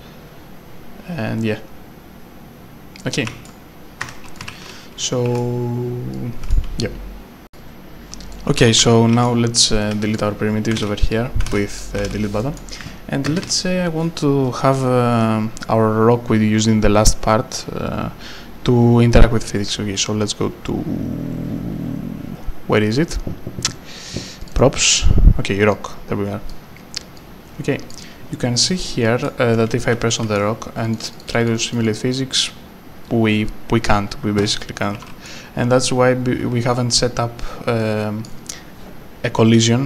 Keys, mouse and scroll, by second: 3.2 a, 4.0 Escape, 4.7-6.2 typing, 6.1 right click, 7.5 click, 8.3 right click, 8.4-10.4 typing, 9.6 click, 9.8 right click, 10.8 Delete, 11.7 click, 11.7 Delete, 12.0 Delete, 12.6 right click, 13.3 ctrl+space, 24.4 click, 24.5 double click, 25.7 click, 29.1 right click, 29.6-30.9 typing, 30.1 right click, 30.8 click, 31.0 double click, 34.6 right click, 35.3 d, 36.2 scroll, 36.3 scroll down 1, 36.6 scroll up 1, 37.8 right click.